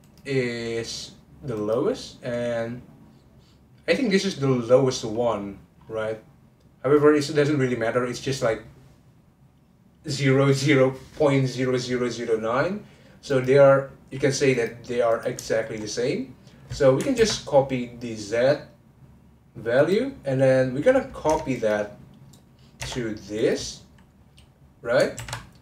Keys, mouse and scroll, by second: 0.0 click, 1.5 click, 5.1-8.8 scroll down 11, 13.3 click, 14.1-14.5 scroll up 1, 14.5 click, 15.1 click, 15.5-17.1 shift+middle drag, 17.1 ctrl+c, 19.8 click, 20.8 scroll down 2, 21.3 Tab, 21.5 click, 23.3 click, 25.1 ctrl+v.